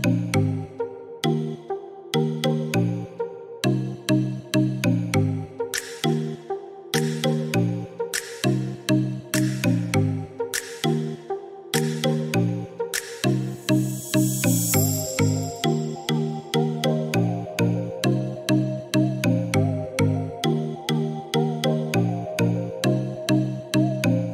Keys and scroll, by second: 13.1 3, 13.7 0, 14.4 Return, 16.6 Escape.